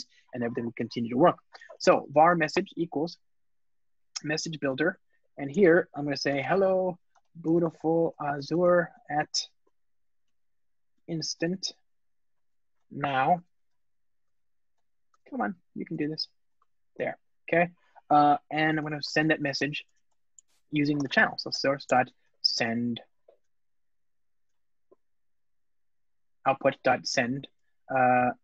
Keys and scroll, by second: 4.6 Return, 12.5 Return, 24.3 Return, 24.5 Escape, 25.2 ctrl+space.